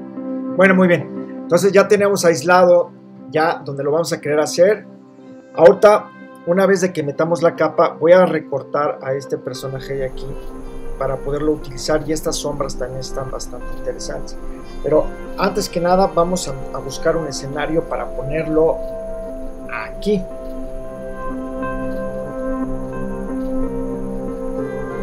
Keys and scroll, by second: 16.6 super+-.